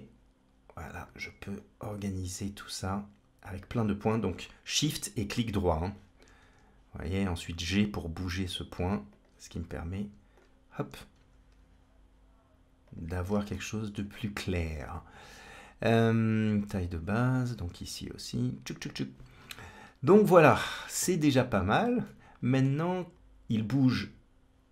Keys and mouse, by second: 2.1 g, 6.3 g, 11.0 g, 13.4 middle click, 16.0 click, 16.1 g, 17.2 shift+click, 17.6 g, 20.1 middle click, 22.0 middle click, 23.1 click, 23.9-24.7 drag.